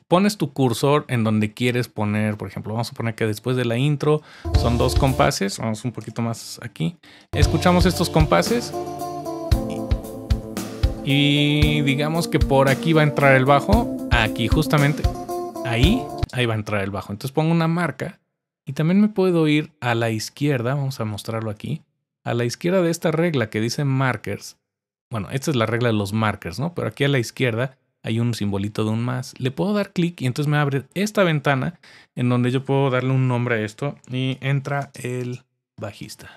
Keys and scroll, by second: 6.0 Return, 7.2 Return, 7.2 space, 16.2 space, 34.0-36.3 typing.